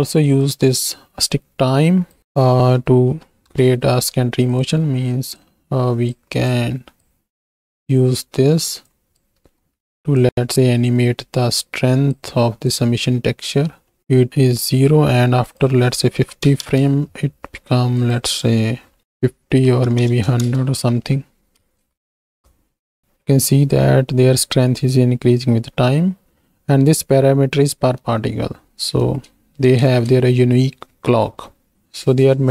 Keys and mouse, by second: 0.5-3.5 drag, 4.5 click, 4.9 middle click, 5.3 click, 6.4 click, 8.9 click, 9.4 ctrl+x, 10.3-12.5 ctrl+drag, 12.9 click, 13.6 middle click, 14.4 shift+middle click, 15.7-16.8 drag, 18.1-20.5 drag, 20.1 KP_0, 21.6 ctrl+space, 23.0 shift+Right, 23.0 shift+Left, 23.0 space, 25.5 space, 28.0 space, 29.1 space, 29.9 ctrl+space.